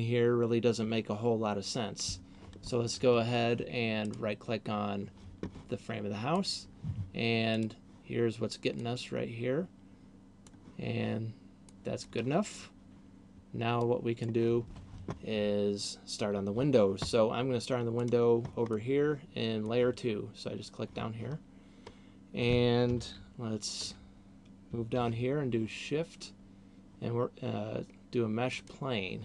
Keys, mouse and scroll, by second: 4.0 right click, 6.3 click, 7.5 click, 14.0 click, 18.0 click, 18.5 middle click, 22.0-23.3 scroll up 1, 23.3 ctrl+KP_2, 24.0 ctrl+KP_2, 25.0 shift+a.